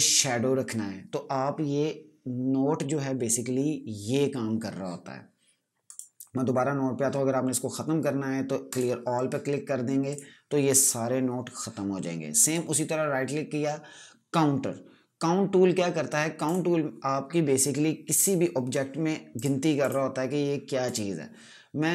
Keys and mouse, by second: 5.8 right click, 8.6 click, 12.3 right click, 16.3 click.